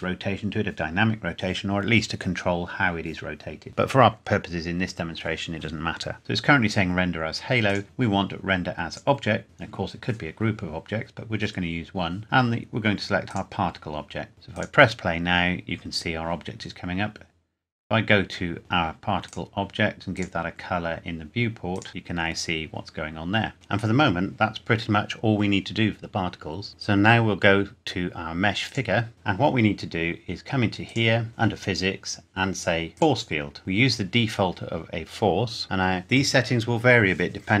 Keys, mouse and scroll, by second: 7.7 click, 8.9 click, 9.4-11.1 scroll down 1, 12.2 click, 14.5 click, 17.8 scroll down 1, 19.3 click, 20.7-21.4 scroll down 1, 21.7 click, 21.9-22.3 scroll up 1, 28.7 click, 30.9 click, 32.9 click.